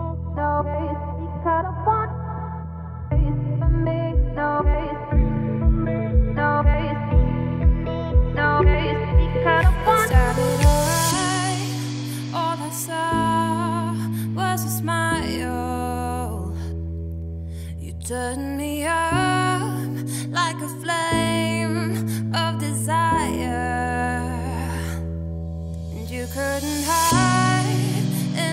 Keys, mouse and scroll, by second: 1.0 click, 1.3 click, 1.5 scroll down 1, 1.6-3.3 middle drag, 3.3 click, 3.6 scroll up 2, 3.9 s, 4.9-5.3 scroll down 3, 5.3 click, 5.5 scroll down 1, 5.6-6.6 middle drag, 6.6-7.3 scroll up 5, 7.3 click, 7.5-8.0 middle drag, 8.0 click, 8.3-8.6 scroll down 2, 8.6-9.5 middle drag, 9.5-9.9 scroll up 3, 9.9-12.1 shift+middle drag, 12.1 scroll down 3, 12.3-13.2 middle drag, 13.2 scroll up 2, 13.5 click, 13.7 Tab, 13.9 middle click, 14.2 2, 14.4 click, 14.9 shift+click, 15.4 shift+click, 15.8 shift+click, 16.2 middle click, 16.7 ctrl+b, 18.4 Tab, 18.5 scroll down 2, 18.6 middle click, 19.5 ctrl+z, 19.6 ctrl+z, 20.0 Tab, 20.1 click, 20.3 scroll down 2, 20.4-20.9 middle drag, 20.9 ctrl+s, 21.1-21.6 middle drag, 21.6-22.0 scroll up 2, 22.0-22.4 shift+middle drag, 22.4-23.0 scroll up 3, 23.0-23.7 middle drag, 23.7-24.1 scroll down 2, 24.1 middle drag, 24.4 scroll up 1, 24.6-25.0 shift+middle drag, 25.0 click, 25.2 Tab, 25.3 middle click, 25.8 click, 26.5 middle click, 26.7-27.1 scroll up 1, 27.1-28.5 shift+middle drag.